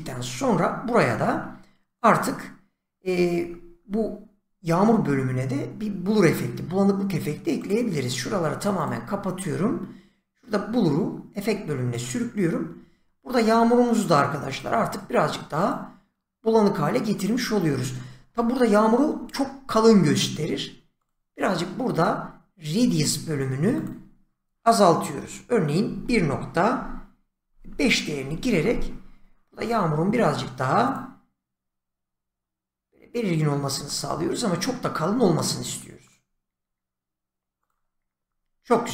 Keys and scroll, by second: 25.8 1, 27.1-28.2 typing.